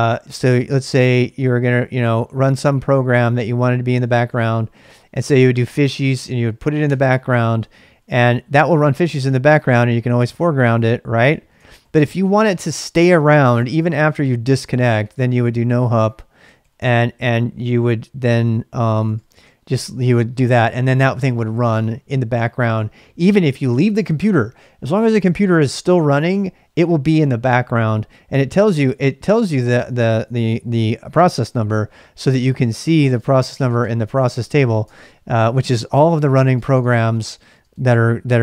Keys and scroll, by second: 36.1 typing.